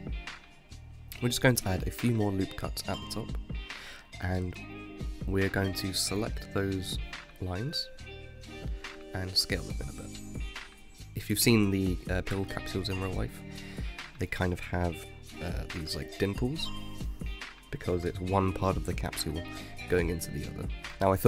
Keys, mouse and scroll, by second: 0.6 ctrl+r, 2.4 ctrl+r, 3.5 ctrl+r, 5.0 click, 5.8 shift+scroll up 3, 6.4 scroll up 4, 6.9-8.1 shift+middle drag, 8.1-10.1 drag, 10.1 s, 13.1 click, 14.5 s, 17.4 click, 19.1 click, 19.9 Tab, 20.8-21.2 middle drag.